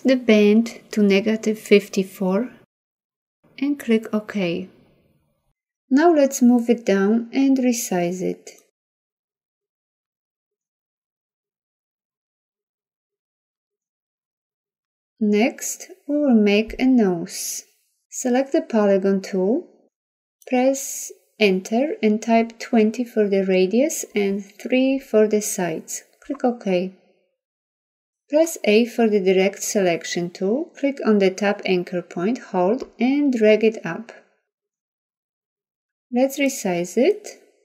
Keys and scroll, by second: 28.4 a.